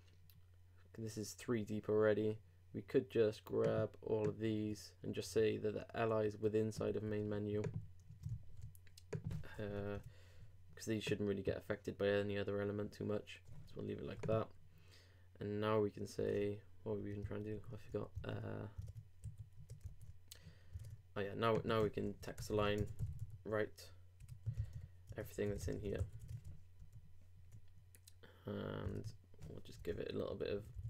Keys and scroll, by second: 6.8 super+x, 8.1 super+Page_Up, 9.6 shift+super+BackSpace, 16.3 super+Tab, 17.3 super+2, 17.5 super+3, 18.2 super+r, 18.8 super+Tab, 19.2 super+s, 19.6 super+Tab, 19.9 super+r, 20.8 super+Tab, 26.0 super+;, 26.2 super+Tab, 26.8 super+r, 29.0 super+Tab, 29.8 super+Return.